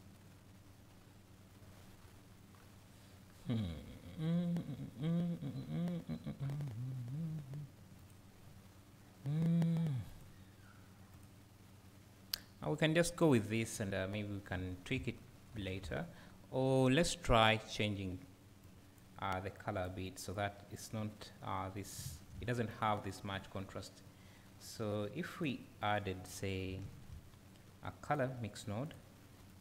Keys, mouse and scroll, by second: 0.9-3.1 scroll down 2, 3.1-13.9 scroll down 1, 13.9-14.3 scroll up 2, 15.2 scroll down 1, 18.7 click, 20.4 click, 21.7-22.0 scroll up 2, 22.0 `, 24.8-26.0 drag.